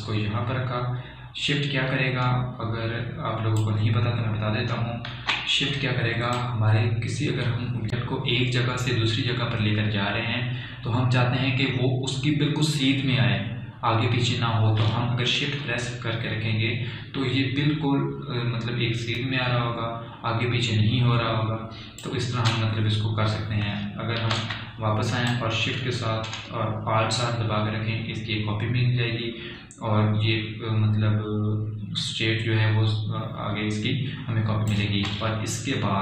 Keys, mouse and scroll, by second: 6.7 ctrl+z, 7.9-17.9 drag, 26.0 ctrl+z, 26.9-36.0 drag, 27.1 typing, 29.4-30.1 typing.